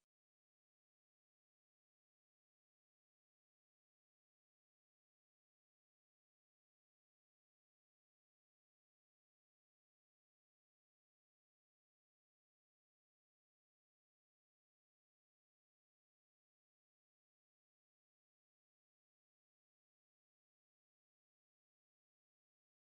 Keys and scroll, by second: 3.2 Return, 3.5-12.6 typing, 5.6 Left, 10.0 Left, 16.1 Return.